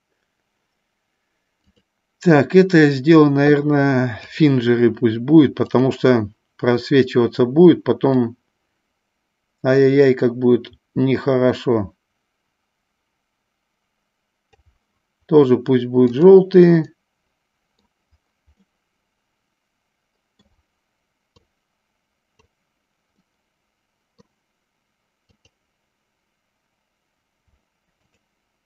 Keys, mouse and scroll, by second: 1.7-4.7 drag, 5.7 click, 8.3-14.8 drag, 17.1 middle click, 19.0-20.8 middle drag, 21.6-22.7 drag, 23.5-24.6 middle drag, 25.5-26.7 drag, 28.2 shift+click.